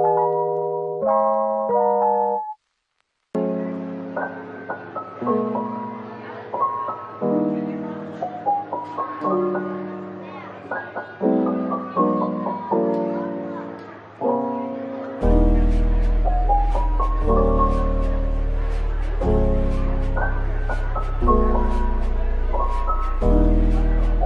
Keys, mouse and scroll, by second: 0.6 middle click, 0.7-1.1 scroll down 1, 2.4 ctrl+z, 2.8 ctrl+z, 3.1 ctrl+z, 3.8 middle click, 4.4 scroll up 1, 4.6-7.9 typing, 10.3 typing, 12.2 double click, 12.4-12.8 scroll down 1, 13.1 middle click, 14.2-15.3 scroll down 1, 15.5 ctrl+s, 16.0-17.7 scroll up 1, 19.5 shift+right click, 20.0 typing, 22.2 typing.